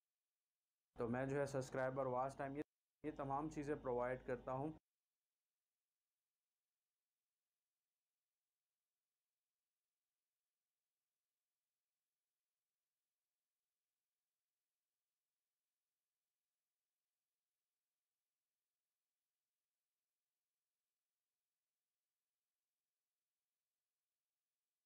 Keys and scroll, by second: 0.4 shift+Delete, 0.9 space, 2.6 space, 4.7 space, 5.8 c, 10.0 v, 12.2 shift+Delete, 15.0 ctrl+i.